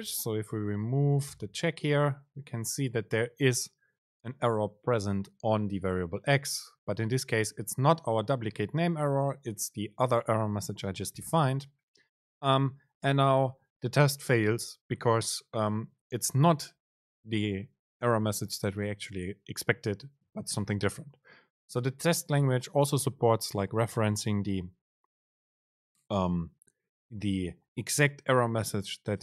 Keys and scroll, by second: 1.6 BackSpace, 11.4 super+z.